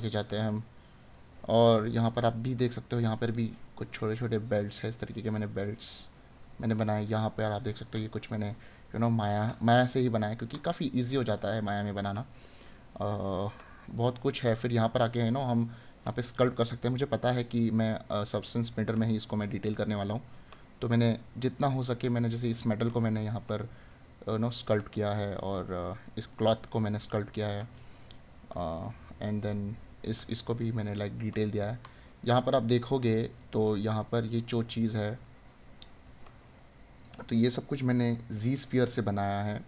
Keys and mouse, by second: 2.9 right click, 6.2 right click, 12.0 right click, 15.8 right click, 18.8 right click, 23.4 right click, 27.4 right click, 35.2 right click, 37.3 right click.